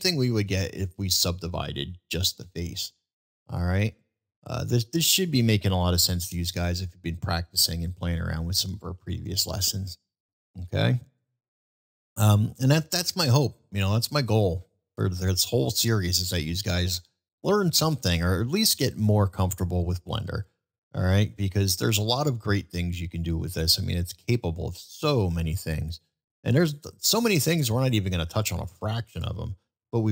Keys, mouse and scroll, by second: 0.2-0.5 middle drag, 2.4 ctrl+z, 3.3 click, 6.0 shift+middle drag, 6.7-7.2 shift+middle drag, 8.3 middle drag, 9.0 shift+middle drag, 9.5-9.9 shift+middle drag, 10.3 middle drag, 10.8 shift+middle drag, 11.7 shift+middle drag, 12.5 shift+middle drag, 13.0 shift+middle drag, 13.9 shift+middle drag, 14.4-14.9 shift+middle drag, 15.3-15.6 shift+middle drag, 15.9 middle drag, 17.1 shift+middle drag, 17.7 middle click, 28.4 middle click.